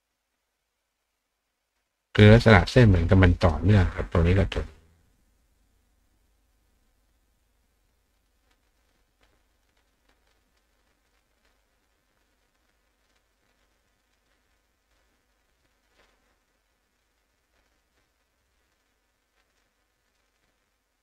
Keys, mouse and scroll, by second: 0.9-1.8 drag, 2.8 click, 4.6 click, 5.4 click, 6.8-7.6 drag, 8.8 click, 9.9 click, 10.5 click, 11.1 click, 12.4 click, 13.8 click, 14.3 click, 15.9 click, 19.6 click.